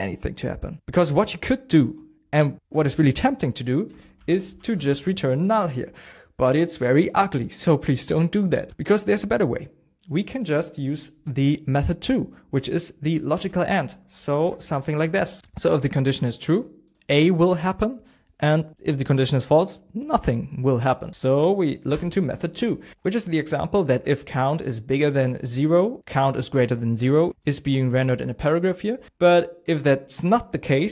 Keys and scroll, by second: 13.5 &, 15.0 shift+a, 21.5 Down.